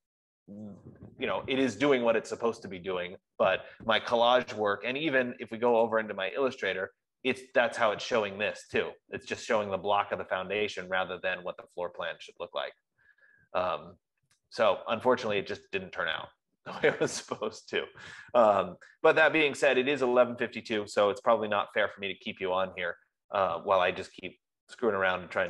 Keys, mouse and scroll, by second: 6.6-11.4 drag.